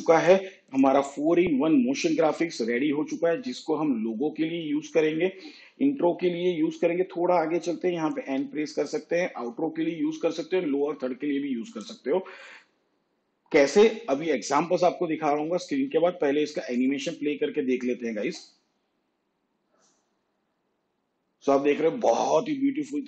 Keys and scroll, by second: 2.3 shift+/, 8.3 n, 18.3 space.